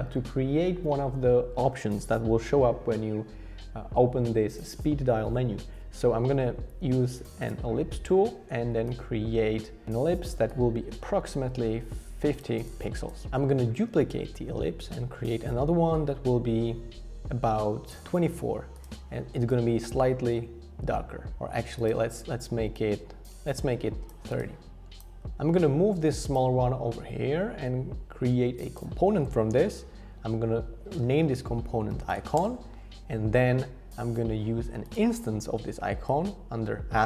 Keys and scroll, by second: 6.7 o, 13.9 super+d, 30.7 super+r, 31.6-32.6 typing.